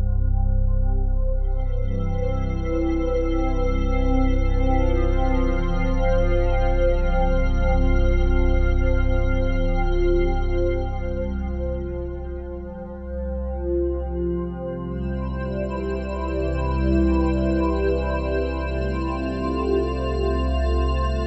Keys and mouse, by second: 0.0 click, 0.3 click, 3.5 right click, 4.7 click, 6.6-7.4 typing, 7.8 Return, 9.7 s, 10.3 Escape, 11.1 click, 12.6 click, 13.5-13.8 typing, 14.6 click, 15.6 typing, 16.8-20.7 alt+drag.